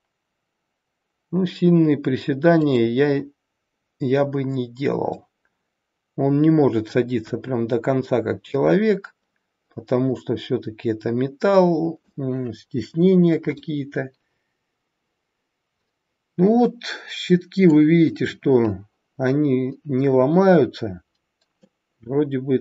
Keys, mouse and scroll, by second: 4.1-5.1 scroll down 6, 5.1 middle click, 7.2 KP_1, 10.0 middle click, 13.0 scroll up 3, 13.5 middle click, 21.6 middle click.